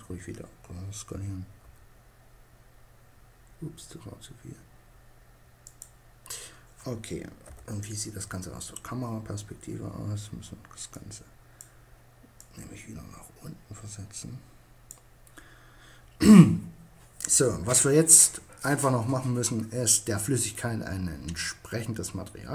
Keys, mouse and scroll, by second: 0.7 s, 4.8-6.4 drag, 6.5 KP_0, 9.9-13.1 drag.